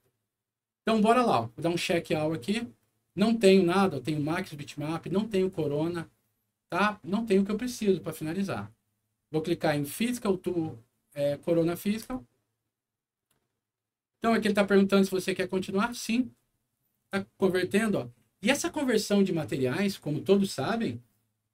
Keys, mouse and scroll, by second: 1.8 click, 11.9 click, 15.7 click.